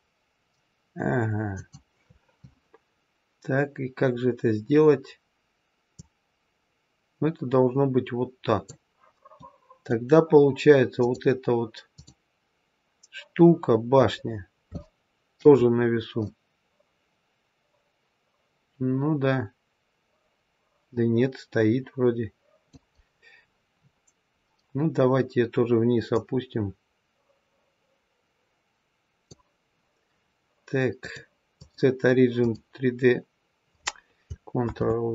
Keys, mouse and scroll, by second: 3.5-5.9 scroll down 2, 5.9 click, 9.3 middle click, 10.1-10.9 scroll down 1, 10.9 click, 11.8 click, 14.3-14.8 scroll up 3, 14.8 shift+middle click, 15.5-16.2 scroll up 3, 16.2 middle click, 22.9-24.3 scroll down 5, 24.3-25.1 scroll down 3, 26.0 click, 30.9 click, 34.6 ctrl+z.